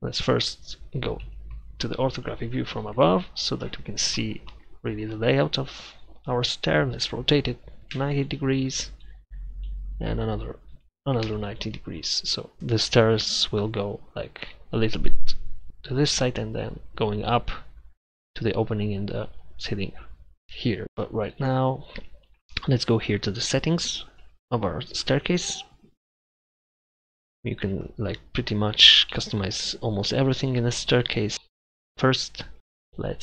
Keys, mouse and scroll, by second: 1.3 KP_7, 6.9 r, 10.9 r.